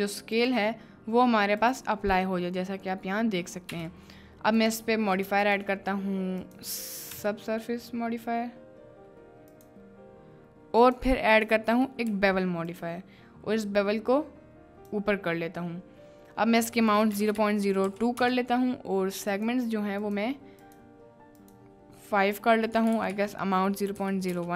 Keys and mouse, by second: 0.3 click, 1.6 click, 3.7 n, 4.6 click, 5.2 click, 5.4-9.7 drag, 10.8-12.8 drag, 13.6-14.9 drag, 17.0-18.2 drag, 19.3 click, 20.0 click, 20.7 click, 21.5-24.4 drag.